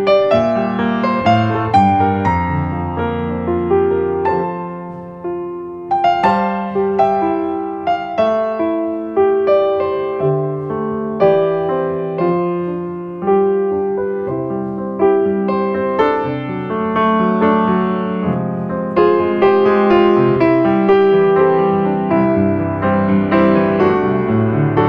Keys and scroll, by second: 8.1 space, 20.6 space.